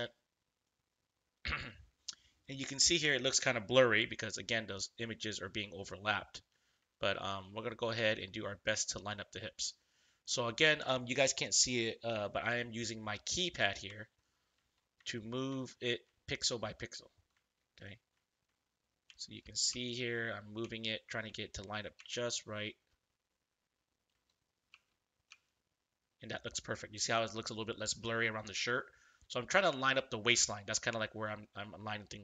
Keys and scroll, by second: 3.9 ctrl+=, 6.9 ctrl+=, 7.9 space.